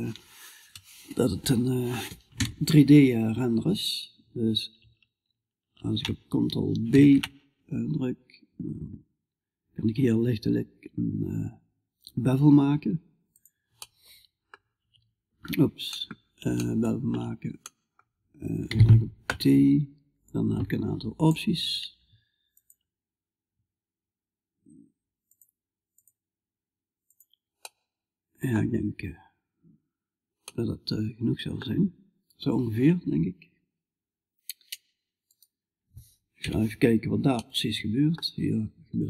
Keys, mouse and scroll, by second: 6.3 ctrl+b, 18.1 t, 23.1-28.6 drag, 28.6-35.8 middle drag, 35.8-36.9 right drag, 35.8 KP_Decimal, 36.9-39.0 middle drag.